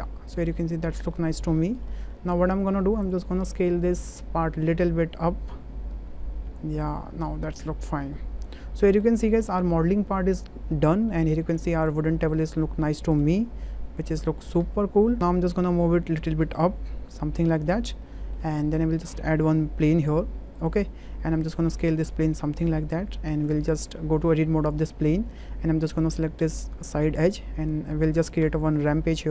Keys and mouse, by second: 0.3 click, 0.6-1.1 middle drag, 1.6 shift+middle drag, 1.9 middle click, 2.5 shift+middle click, 4.0 click, 4.9-6.6 drag, 7.3-8.0 middle drag, 8.4-8.9 middle drag, 9.3 shift+middle click, 9.6-10.8 middle drag, 11.1-11.5 middle drag, 11.9 click, 12.4 middle click, 13.2 `, 14.6 w, 15.8-17.6 drag, 18.0-18.3 middle drag, 18.6 shift+click, 19.5 shift+a, 21.3 s, 22.5 click, 23.5 click, 23.7 Tab, 25.2 2, 26.4 click, 28.4 e, 28.9 z.